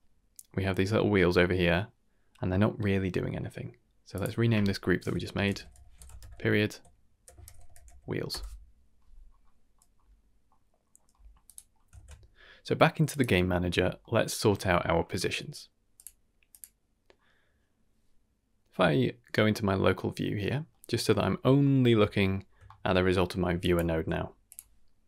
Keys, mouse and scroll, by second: 0.9-1.3 middle drag, 2.3-4.1 middle drag, 4.1-8.3 drag, 5.7 e, 8.3-9.8 middle drag, 9.1-10.5 scroll down 5, 10.0 middle click, 10.8 scroll down 1, 11.1 middle click, 11.4 click, 11.9 ctrl+s, 13.1 click, 13.7-14.3 scroll down 3, 14.0 middle click, 14.4 middle click, 14.8-15.9 scroll up 1, 15.9 click, 15.9 scroll up 2, 16.5 click, 18.2 KP_Divide, 18.2 ctrl+shift+click, 20.7-21.1 middle drag, 21.2-21.6 scroll down 3, 21.6 shift+middle drag, 22.0-22.3 middle drag, 22.4 scroll down 1, 22.6 shift+middle click, 23.6 shift+drag, 23.9 g, 24.8-25.0 scroll down 1.